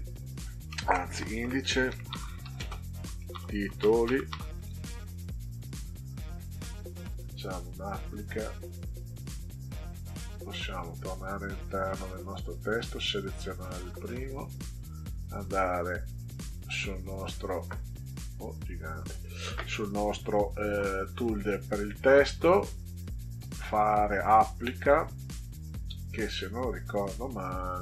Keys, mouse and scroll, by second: 0.8-4.7 typing, 7.7 click, 10.9 click, 11.1 click, 11.4 click, 12.4 click, 15.3-16.5 drag, 18.0 click, 20.2 click.